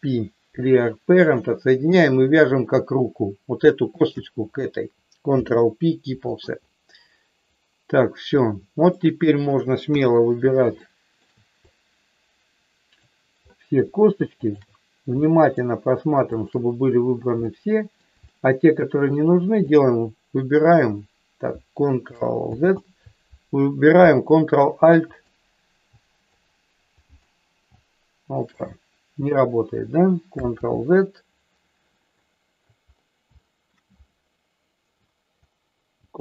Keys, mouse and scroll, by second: 1.8 click, 3.9 shift+click, 5.2 ctrl+p, 9.0 middle click, 10.0 KP_1, 10.7 shift+middle click, 11.6-13.0 drag, 14.3 shift+click, 15.2 shift+middle click, 16.2 shift+click, 17.4 middle click, 18.2 shift+middle click, 19.6 shift+click, 22.4 ctrl+z, 24.3 alt+shift+click, 26.3-27.3 shift+drag, 30.6 ctrl+z, 32.2 middle click, 33.3 shift+middle click, 36.1 ctrl+alt+click.